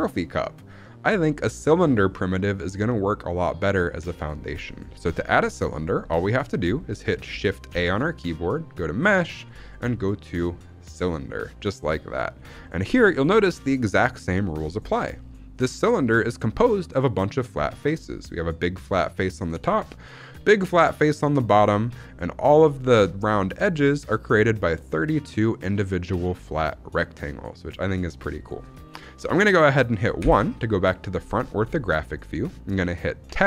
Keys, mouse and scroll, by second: 7.6 shift+a, 11.7-14.8 scroll up 9, 12.5 shift+middle drag, 13.1 shift+middle click, 14.8-15.2 scroll down 1, 19.8-20.2 middle drag, 21.5-22.1 middle drag, 22.6-27.9 middle drag, 28.0-28.6 scroll down 1, 28.6-30.1 scroll down 1, 30.1-31.2 scroll down 1, 30.1 KP_1, 31.4 scroll up 2, 33.2 Tab.